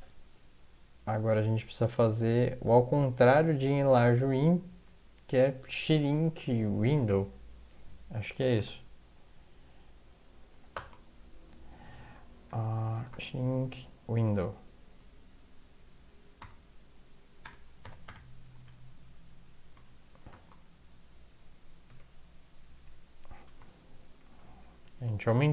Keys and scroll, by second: 8.2-9.1 typing, 10.7 typing, 12.5-13.6 typing, 16.4 typing, 17.6-20.3 typing, 21.9 Tab, 24.9 End.